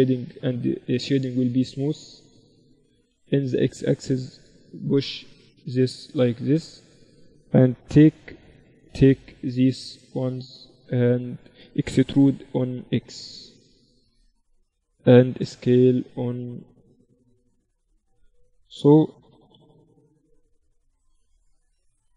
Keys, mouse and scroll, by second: 0.3 t, 2.4 KP_7, 3.2 z, 4.7-6.4 drag, 6.6 Tab, 7.1 a, 8.1 v, 9.2 b, 12.2 e, 15.2 s, 17.4-19.3 drag, 18.4 Tab, 19.4 g, 21.2 z.